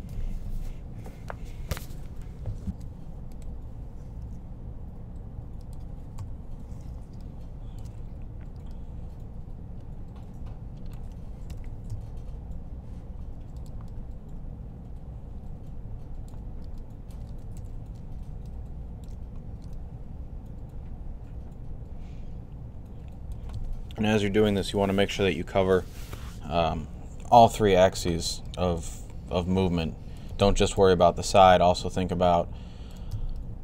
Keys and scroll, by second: 2.6 typing, 4.0 typing, 6.0 typing, 7.8 typing, 11.3-11.7 typing, 17.4 typing, 30.6 3.